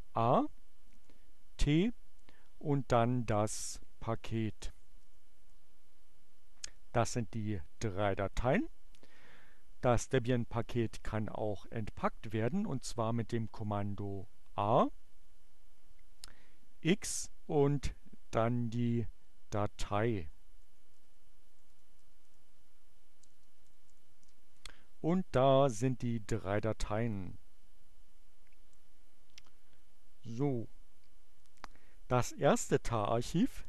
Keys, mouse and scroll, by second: 0.7 t, 4.0-5.0 typing, 5.2 Return, 11.6-12.5 typing, 14.2 space, 16.6 x, 17.2 space, 19.5 d, 21.1-24.3 typing.